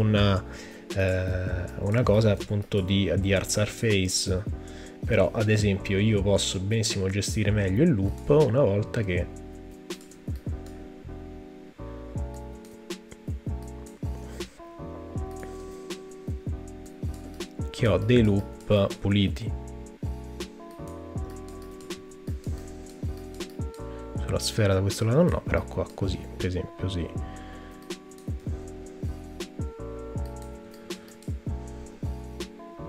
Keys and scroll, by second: 14.3 space, 21.9 super+z, 28.4 super+z, 31.9 space.